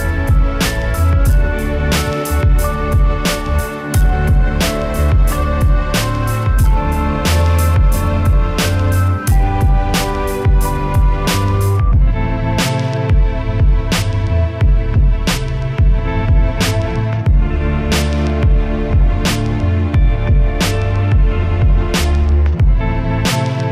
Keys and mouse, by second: 0.3 Tab, 2.7 Tab, 2.9 Tab, 3.6 click, 4.6 right click, 5.0 middle click, 5.0 right click, 5.4 middle click, 5.7 click, 5.8 middle click, 6.1 KP_1, 6.7 middle click, 7.0-8.0 right drag, 8.0 KP_1, 9.8 KP_1, 10.2 ctrl+r, 11.1 click, 11.2 ctrl+r, 11.5 s, 12.0 click, 12.1 ctrl+r, 12.9 a, 13.1 z, 13.2 b, 13.4 right click, 15.1 right click, 15.3 shift+e, 15.8 click, 16.0 shift+e, 16.3 KP_1, 16.4 z, 16.6 Tab, 17.7 KP_1, 18.3 Tab, 19.8 Tab, 20.5 click, 20.7 shift+a, 21.4 click, 22.3 BackSpace.